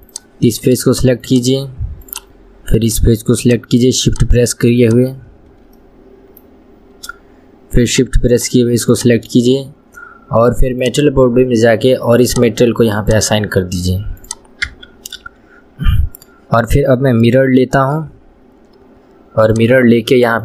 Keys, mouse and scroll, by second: 0.3 click, 1.4 shift+click, 2.2 shift+click, 3.0 shift+click, 3.6 shift+click, 4.2 shift+click, 5.0 shift+click, 5.9-8.0 middle drag, 8.0 shift+click, 8.5 shift+click, 9.1 shift+click, 10.9 click, 12.4 click, 13.2-14.5 drag, 15.4 KP_1, 15.8 scroll down 1, 17.5-19.7 shift+middle drag, 19.7 click.